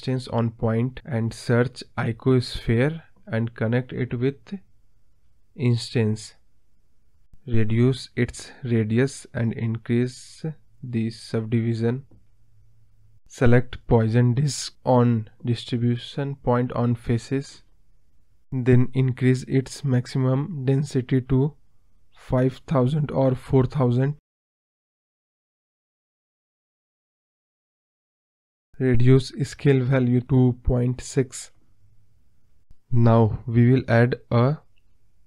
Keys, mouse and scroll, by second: 5.7 click, 6.1-6.9 scroll down 2, 9.9-24.4 drag, 25.5 click, 25.7-26.5 scroll up 14, 26.5 scroll down 1, 26.6-28.7 middle drag, 28.7-30.0 scroll down 2, 30.0-30.8 scroll down 1, 30.8-33.5 drag, 33.8 scroll up 1, 33.9-35.2 scroll down 10.